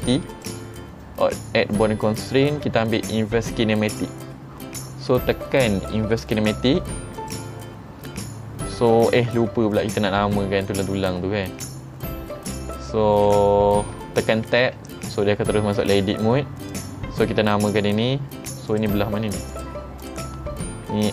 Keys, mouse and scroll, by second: 0.4 click, 7.2 click, 10.0 Tab, 12.5 Tab, 14.6 Tab, 16.8 click, 18.8 click, 19.6 click, 20.1 click.